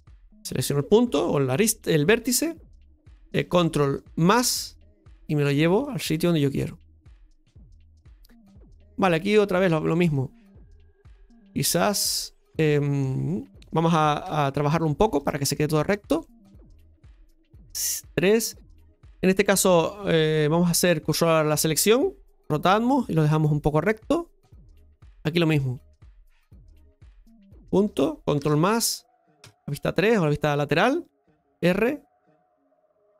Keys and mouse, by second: 0.2-3.3 right drag, 4.4 ctrl+KP_Add, 5.8-8.4 drag, 8.4-10.6 middle drag, 11.1-14.2 middle drag, 14.2 KP_Divide, 15.2 shift+middle click, 16.2 shift+middle click, 26.1 middle click, 27.5 right click, 28.4 ctrl+KP_Add, 31.4 r.